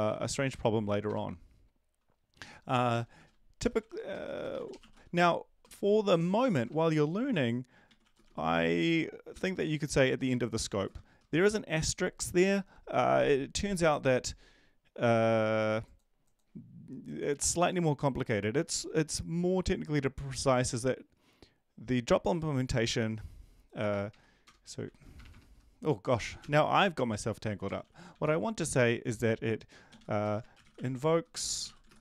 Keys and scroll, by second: 2.7 End, 2.9-5.9 typing, 8.2-11.9 typing, 24.6 /, 24.8 /, 25.5 Delete, 26.3 typing, 27.8-28.2 typing, 30.9-32.0 typing.